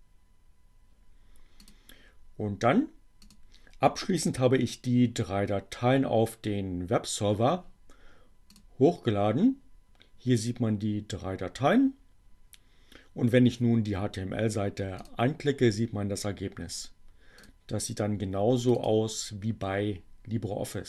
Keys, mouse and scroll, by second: 0.5-1.9 drag, 2.7 click, 4.3 click, 8.5 click, 13.3-15.4 drag, 16.6-17.8 drag, 18.6 click.